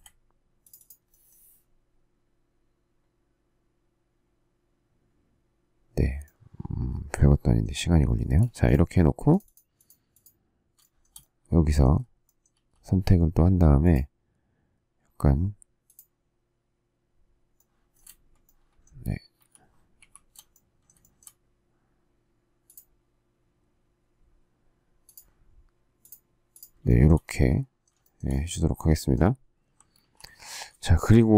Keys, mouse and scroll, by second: 8.2 space, 10.8 shift+middle click, 12.5 s, 19.3 shift+s, 19.6 shift+scroll, 19.9 shift+z, 20.9 shift+middle click, 26.8 shift+middle click, 27.0 shift+double middle click, 27.9 shift+double middle click, 28.2 shift+scroll, 29.9 alt+t.